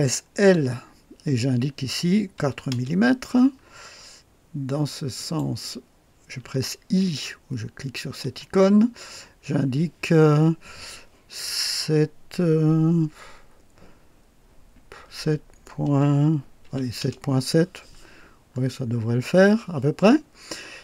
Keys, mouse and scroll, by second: 0.4 l, 2.3 KP_4, 2.7 KP_Enter, 5.1 click, 5.5 typing, 8.2 i, 15.0-17.2 typing, 17.0 Return, 18.5 scroll up 2, 20.2 scroll down 2.